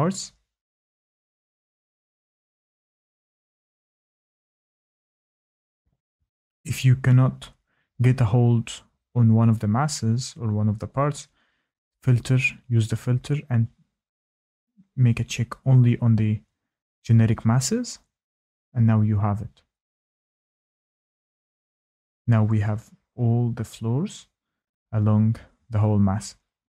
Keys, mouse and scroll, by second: 0.0 shift+middle click, 0.1 Tab, 0.2-1.1 Tab, 0.4 click, 0.4 click, 0.5 click, 0.6 click, 0.6 click, 0.8 click, 0.8 shift+middle click, 0.8 scroll, 0.9 Tab, 1.1 click, 1.1 click, 1.5 Delete, 1.6 click, 1.7 shift+middle click, 2.0-2.9 typing, 2.4 click, 2.4 click, 2.4 scroll, 2.5 click, 2.5 click, 2.8 shift+middle click, 3.0 Tab, 3.1 click, 3.2 Tab, 3.2 click, 3.3-4.4 Tab, 3.4 click, 3.4 click, 3.6 middle click, 3.7 middle click, 3.9 click, 3.9 Tab, 4.0 click, 4.2 click, 4.3 Tab, 4.4 click, 4.4 Tab, 4.5 click, 4.6 click, 4.7 scroll up 4, 4.8 Escape, 7.7 click, 9.5 click, 11.1 click, 12.1 click, 13.0 click, 14.0 click, 14.1 click, 14.2 click, 14.3 scroll, 14.4 click, 14.5 click, 14.5 middle click, 14.5 click, 14.7 shift+middle click, 14.7 middle click, 15.0 Tab, 15.3 click, 15.3 middle click, 15.4 Escape, 15.4 middle click, 15.7 ctrl+click, 16.0 ctrl+click, 16.0 ctrl+click, 16.1 ctrl+click, 16.2 Delete, 16.3 click, 16.3-16.7 scroll, 16.5 click, 16.5 click, 16.7 click, 16.8 click, 17.0 click, 17.0-17.8 typing, 17.2 click, 17.2 scroll, 17.3 click, 17.4 middle click, 17.4 click, 17.4 middle click, 17.5 middle click, 17.5 click, 17.6 click, 17.7 middle click, 17.8 middle click, 17.8 click, 17.8 middle click, 17.8 Escape, 18.0 Escape, 18.1 ctrl+click, 18.2 Delete, 18.2 middle click, 18.5 click, 18.5 scroll, 18.6 click, 18.6 click, 18.8 click, 19.3 click, 19.8-20.7 scroll, 20.5 Escape, 21.1-23.6 scroll, 23.6-24.3 scroll, 24.7 click, 24.7 middle click, 26.2 click.